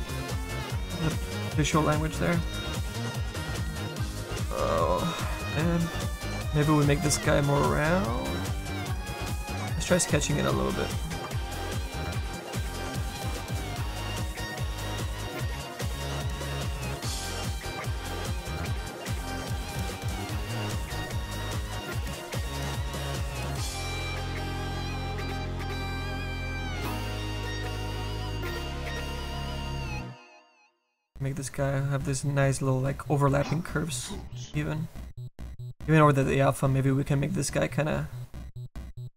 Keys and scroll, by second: 2.0 s, 13.1 s, 17.6 s, 20.5 s, 20.8 s, 21.3 s, 21.6 s.